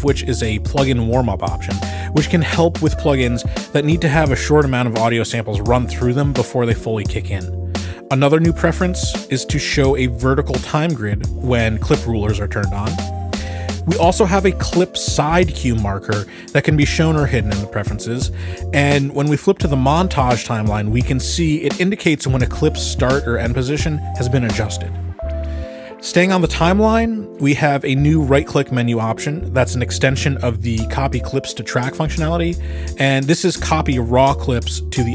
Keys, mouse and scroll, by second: 1.8 click, 4.5 click, 11.6 click, 13.2 click, 16.7 click, 19.6 Escape, 21.6 click, 23.4-24.1 ctrl+scroll, 27.2-28.3 ctrl+scroll, 28.6-29.8 scroll, 31.2 click, 32.8 right click, 33.0 click.